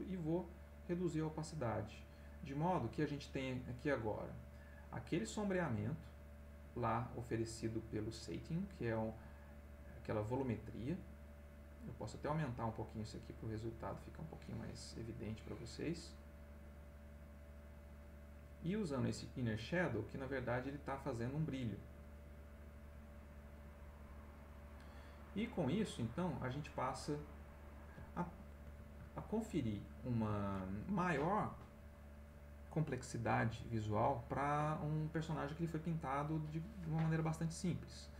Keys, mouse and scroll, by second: 0.1 click, 5.1-6.3 drag, 7.2 click, 9.2-10.4 drag, 13.8 click, 18.4 click, 20.2 click, 26.0 click, 27.4 click, 28.0 middle click, 28.8 ctrl+middle click, 29.8 ctrl+middle click, 31.0 middle click, 33.1 middle click, 35.9 middle click, 36.6 middle click.